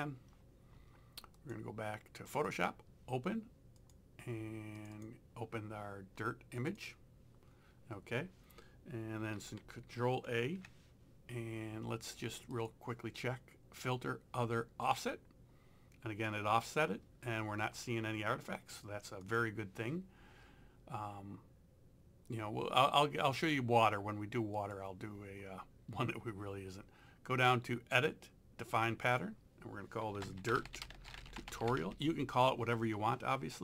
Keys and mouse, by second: 1.4 click, 6.6 click, 9.4 ctrl+a, 12.6 click, 14.9 click, 19.3 click, 24.6 click, 29.1 click, 30.0-32.3 typing.